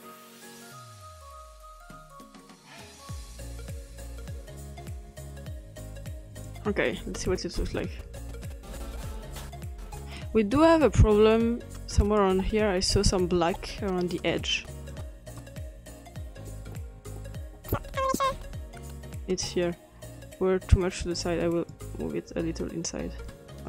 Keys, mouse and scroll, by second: 0.0 click, 0.5 click, 0.9 drag, 1.4-2.1 drag, 2.9-3.4 drag, 3.4 scroll up 1, 3.6 click, 4.6 click, 5.2 click, 5.4 click, 6.5 click, 10.2-10.7 drag, 12.2 click, 15.0 click, 15.5 click, 16.5 click, 16.9 click, 17.2 drag, 20.2-21.7 drag.